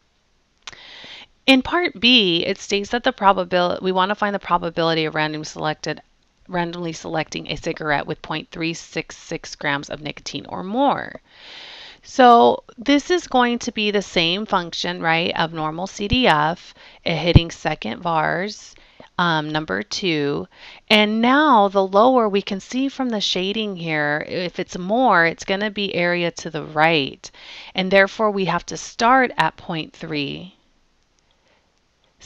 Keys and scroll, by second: 19.9 2, 31.3 ., 32.1 3.